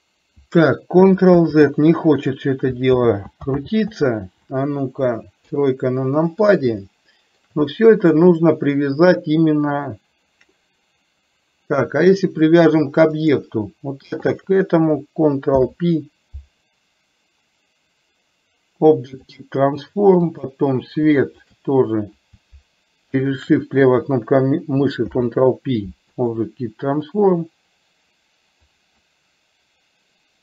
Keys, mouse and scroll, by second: 1.4 ctrl+z, 3.0 ctrl+z, 3.7 ctrl+z, 5.5 KP_3, 6.9-7.5 shift+middle drag, 13.4 click, 14.5 shift+click, 15.6 ctrl+p, 20.4 click, 21.5 shift+click, 23.5 shift+click, 25.1 ctrl+p, 29.0 click.